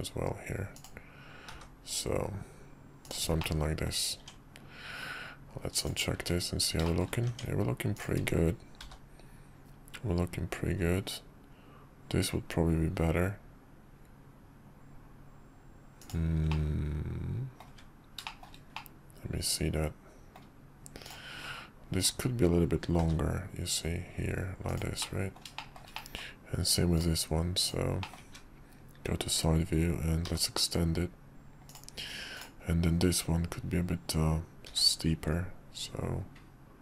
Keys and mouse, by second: 1.5 g, 3.4 middle click, 4.2 Tab, 5.7 click, 6.1 `, 6.8 shift+middle click, 7.9 Tab, 7.9 click, 8.8 g, 16.5-17.6 middle drag, 17.8 `, 18.2 middle click, 18.7-20.4 middle drag, 22.0 click, 23.0 g, 25.0 middle click, 25.6 middle click, 25.9 middle click, 26.9-28.0 drag, 28.0 middle click, 28.3 `, 30.2 g, 34.6 r.